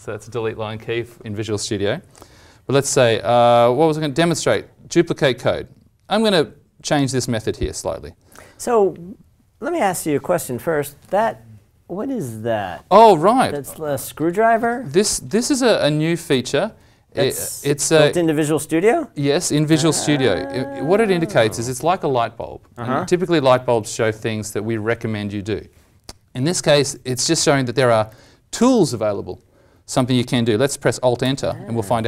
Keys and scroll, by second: 28.0 ctrl+Right, 31.2 alt+Return.